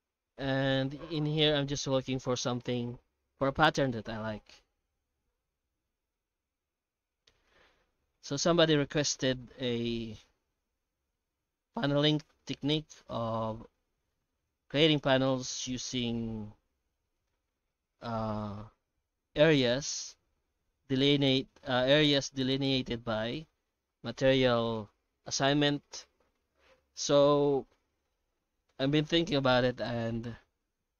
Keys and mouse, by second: 0.3-1.8 middle drag, 5.5 alt+shift+z, 5.9-6.4 middle drag, 6.9 F9, 14.8-17.2 middle drag, 18.4 F9.